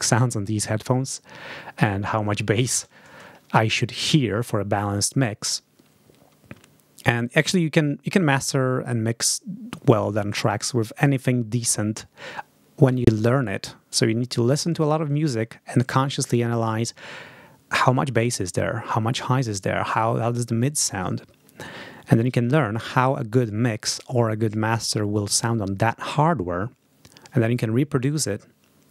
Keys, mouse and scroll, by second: 3.5 ctrl+scroll down 2.